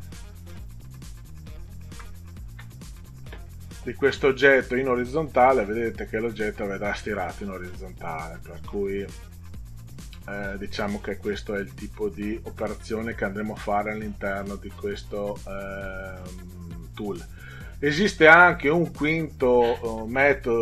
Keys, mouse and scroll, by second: 0.8 scroll down 2, 1.5 ctrl+scroll down 2, 5.0 click, 17.9 click.